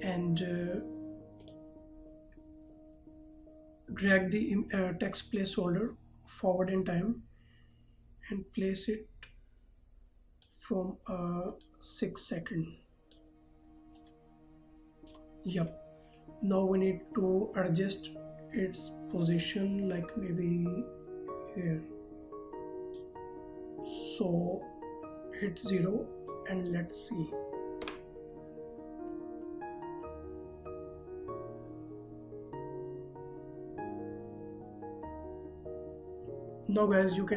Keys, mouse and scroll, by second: 1.7 click, 4.7 click, 19.8 click, 26.5 click, 28.2 KP_0.